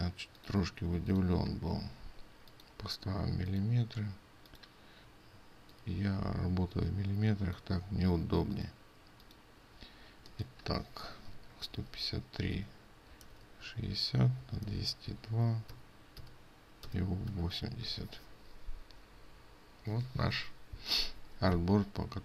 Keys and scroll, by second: 11.3 ctrl+a.